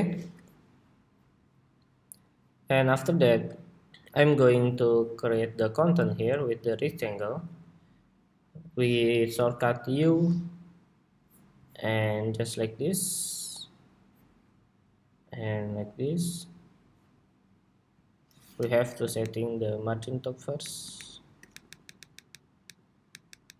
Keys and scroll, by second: 18.9 alt+shift+Up, 20.4 alt+Up, 21.4 alt+Down, 21.9 alt+Down, 22.4 alt+Down, 23.0 alt+Down, 23.2 alt+Down.